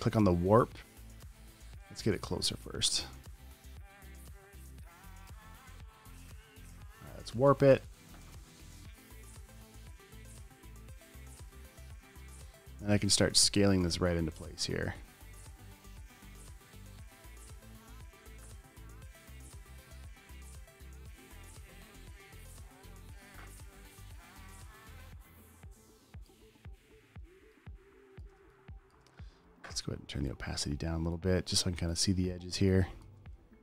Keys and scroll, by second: 7.7 space, 8.2 super+space, 8.8 space, 9.0 space, 22.8 space, 26.1 space, 26.8 space, 28.8 space, 28.9 space, 29.3 space.